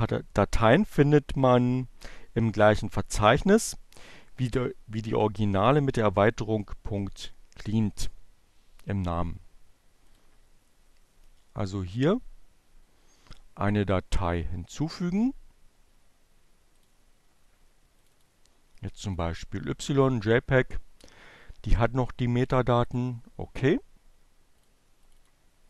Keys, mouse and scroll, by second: 9.3 click, 14.6-16.3 drag, 16.9 click, 18.1 click, 21.9 click, 23.6 click, 24.3 click.